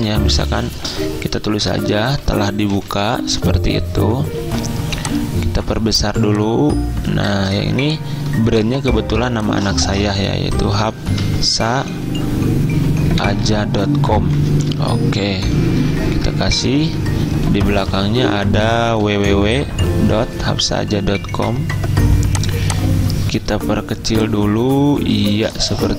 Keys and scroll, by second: 2.9 typing, 9.2 t, 9.8 ctrl+a, 10.4-11.8 typing, 13.1-15.3 typing, 16.0 ctrl+Left, 16.9 Left, 17.1 Left, 17.7 Left, 17.8 Left, 18.1-19.3 typing, 19.0 Left.